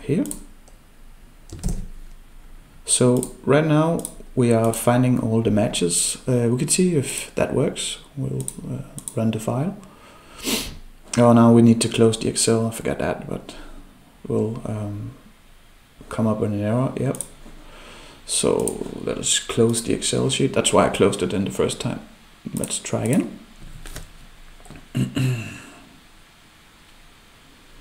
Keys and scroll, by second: 1.6 ctrl+v.